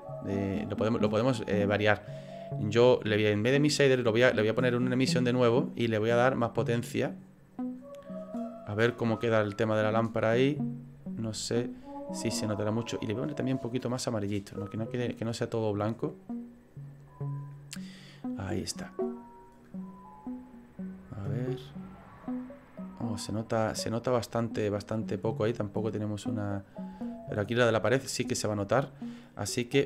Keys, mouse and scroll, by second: 0.5 scroll up 10, 1.6 scroll down 1, 1.7-2.8 scroll down 1, 2.8 click, 2.8-3.7 scroll down 2.